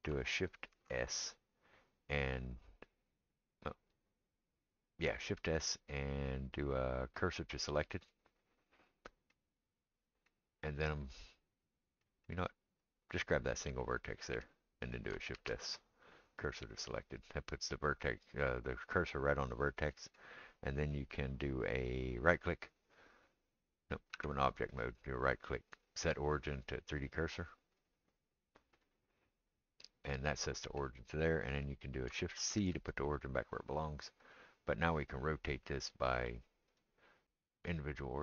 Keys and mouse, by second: 0.7 shift+s, 12.9-22.2 middle drag, 15.3 shift+s, 22.2-38.2 right drag, 24.1 Tab, 32.6 shift+c, 36.8-38.2 drag, 36.8-38.2 middle drag.